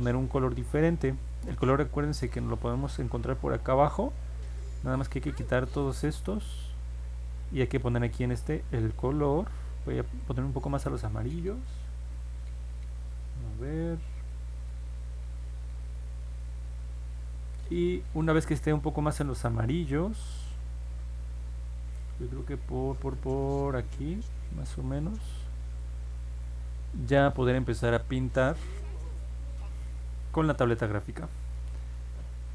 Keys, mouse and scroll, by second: 1.2-2.7 scroll down 3, 3.1-3.6 scroll up 2, 4.4 click, 5.1 click, 5.8 click, 6.2 click, 7.8 click, 10.2-11.6 drag, 12.3-13.0 scroll down 2, 13.3 middle click, 13.8 scroll down 1, 14.3 middle click, 14.8 scroll down 1, 15.4 middle click, 16.1 scroll up 1, 16.4 middle click, 16.8 middle click, 17.2 middle click, 17.7 middle click, 19.3-25.7 drag, 28.0-29.7 drag.